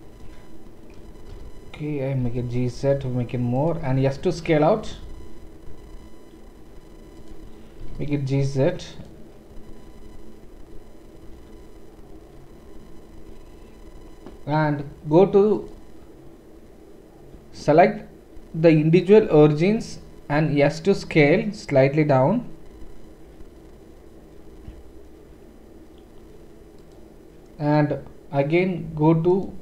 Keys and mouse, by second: 1.3 KP_1, 2.2 g, 3.8 s, 7.8 g, 15.6-27.0 drag, 20.3 s, 27.0-29.3 middle drag, 29.3-29.6 drag.